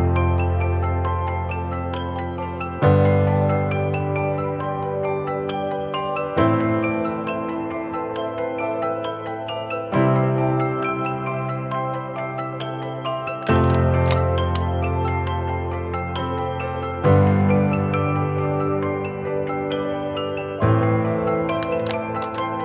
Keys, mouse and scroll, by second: 1.0 alt+shift+click, 8.3 Return, 10.1 Right, 10.3 Right, 10.5 Right, 10.7 Right.